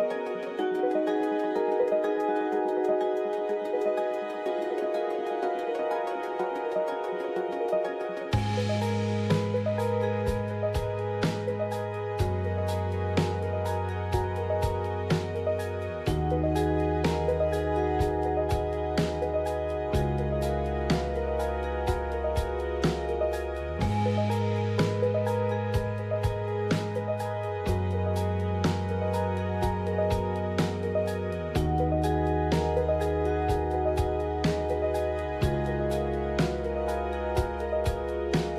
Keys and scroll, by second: 0.0-1.1 typing, 2.7-3.5 typing, 5.9 typing, 7.6 typing, 9.3-23.1 typing, 24.2-29.6 typing, 31.7-32.5 typing.